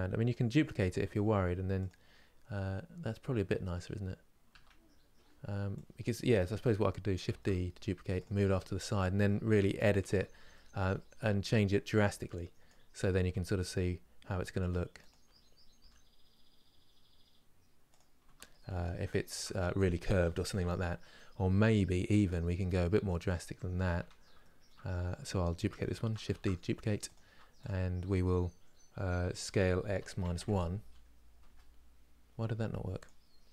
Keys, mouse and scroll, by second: 3.6-4.2 scroll down 1, 4.2 Tab, 6.1 click, 7.0 shift+d, 8.3 shift+middle click, 8.7 scroll up 1, 9.5 scroll down 1, 9.8 Tab, 10.2 shift+middle click, 10.7-12.3 scroll down 1, 12.3 click, 13.0 g, 18.2 scroll down 1, 18.8-21.5 shift+middle drag, 21.5 scroll up 1, 22.3 scroll down 2, 23.7 Tab, 24.1 shift+middle click, 24.7 Tab, 25.5 shift+middle click, 26.1 shift+d, 27.3 click.